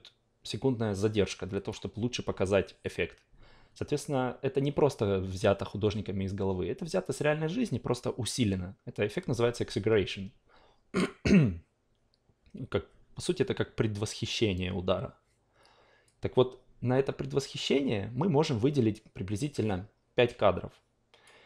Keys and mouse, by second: 16.0-21.4 drag.